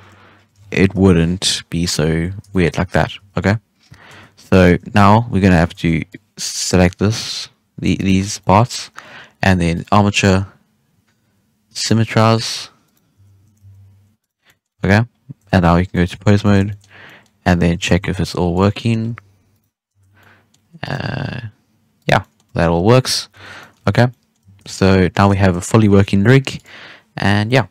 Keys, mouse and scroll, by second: 0.5 alt+a, 0.9 KP_1, 2.4-3.1 shift+middle drag, 3.1 Tab, 3.3-3.8 scroll down 7, 3.8 scroll up 4, 4.0 Tab, 4.6 Tab, 4.9 a, 5.7 alt+a, 6.0 click, 7.9 shift+right click, 8.3-9.7 middle drag, 9.7-12.7 drag, 12.8 right click, 13.1 z, 13.5 g, 14.3 scroll down 1, 14.4 middle drag, 14.7 a, 15.0-15.4 scroll up 2, 15.4 ctrl+Tab, 15.8 middle drag, 16.1 alt+a, 16.3 scroll down 1, 16.3-16.8 shift+middle drag, 16.8 scroll up 1, 17.0-17.4 middle drag, 17.4 right click, 17.6 g, 18.7-19.0 middle drag, 19.0 g, 19.7-20.1 scroll down 2, 20.1-20.8 middle drag, 20.8 right click, 20.9 g, 22.1 middle drag, 22.4 a, 23.3 alt+g, 23.5 scroll down 1, 23.5 middle drag, 23.8 alt+a, 24.0 scroll up 1, 24.0 middle drag, 24.3-24.6 scroll down 1, 24.6-27.7 middle drag.